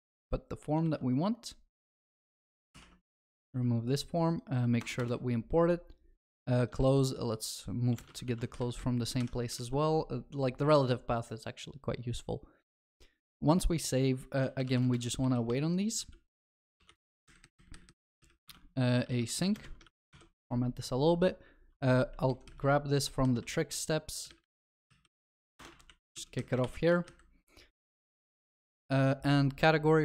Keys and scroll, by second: 0.1 ctrl+x, 0.8 ctrl+v, 2.7 ctrl+y, 4.8 alt+Return, 8.1 ctrl+v, 9.2 ctrl+y, 19.9 ctrl+alt+shift+l, 20.1 ctrl+s, 25.9 ctrl+s, 26.6 ctrl+y, 28.3 ctrl+s.